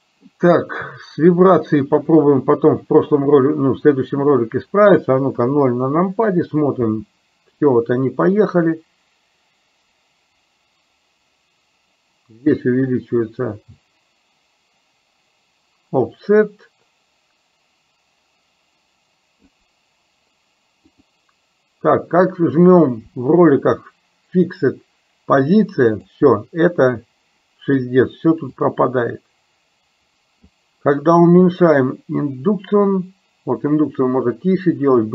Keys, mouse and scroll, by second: 2.0 click, 5.5 KP_0, 7.0 space, 8.5-19.6 drag, 21.0 click, 26.0 click, 28.6-30.5 drag, 31.8-35.1 drag.